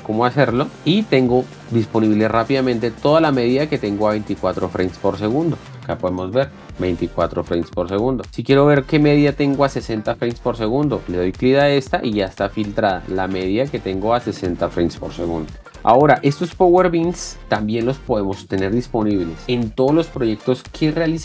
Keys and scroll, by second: 8.4 space, 14.7 space.